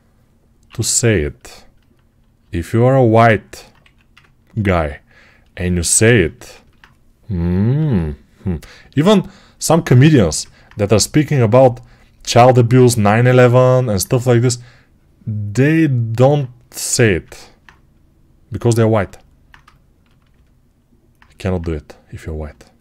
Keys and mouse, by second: 0.5 6, 3.7 1, 6.4-9.7 ctrl+alt+drag, 7.6 p, 10.0 g, 16.8 g, 17.1-22.8 alt+drag.